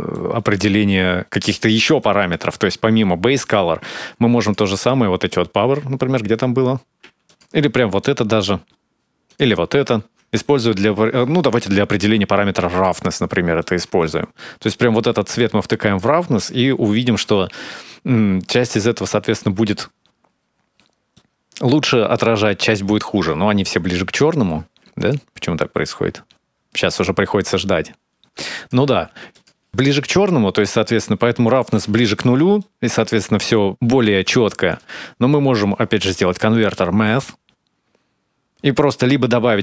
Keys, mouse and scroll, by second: 1.8 middle click, 4.3 ctrl+shift+click, 7.1 ctrl+shift+click, 13.4 middle click, 14.7 click, 16.2 ctrl+shift+click, 20.9 middle click, 24.8 ctrl+shift+click, 27.4-28.0 scroll up 3, 27.6 middle click, 28.0 click, 29.1 ctrl+shift+click, 29.7 middle click, 32.4 middle click, 34.5 shift+a.